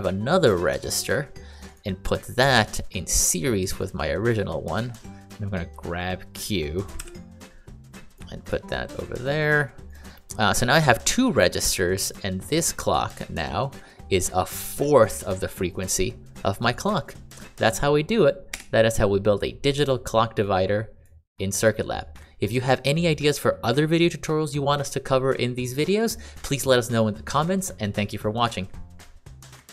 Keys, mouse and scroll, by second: 1.6 click, 8.4 click, 9.8 click, 18.5 Escape, 21.5 click.